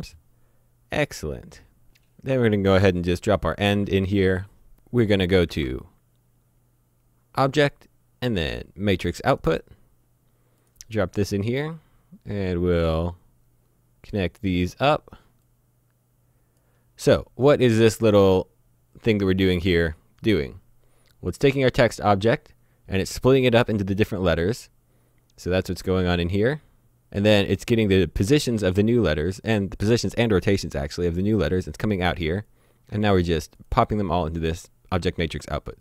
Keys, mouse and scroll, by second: 1.0 click, 3.0 click, 3.7 shift+a, 5.1 click, 5.5 shift+a, 9.3 click, 12.9 click, 20.5 click, 32.5 click.